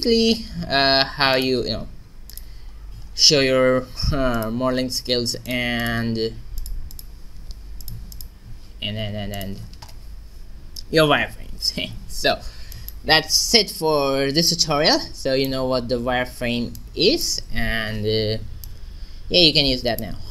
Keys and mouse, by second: 1.4 click, 3.4 click, 4.0-5.1 middle drag, 5.1-11.1 drag, 11.7 n, 12.3 middle click, 13.6-14.8 drag, 14.8 right click, 15.7 a, 18.6-20.2 drag.